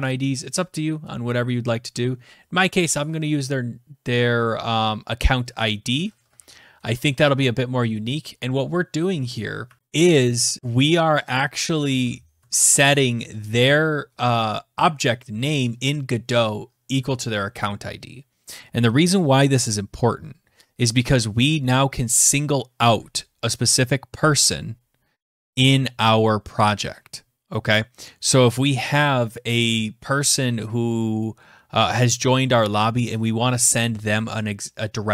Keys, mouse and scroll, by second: 5.9-6.5 typing, 8.9-13.6 typing.